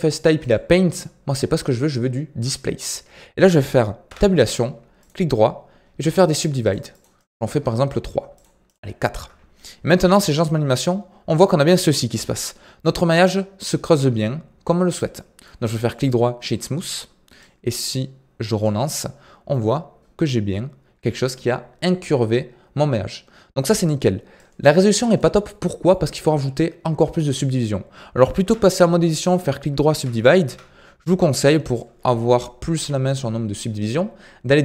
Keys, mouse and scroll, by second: 0.4-3.4 drag, 4.0 Tab, 5.0-9.1 right drag, 9.1 Tab, 10.0-11.5 drag, 11.5 scroll up 1, 11.7-15.8 middle drag, 15.8 right click, 17.4-18.8 drag, 18.8-23.8 middle drag, 24.3-25.4 drag, 25.4-28.4 middle drag, 28.4 Tab, 29.0 right click, 30.4 Tab, 31.6-34.6 drag.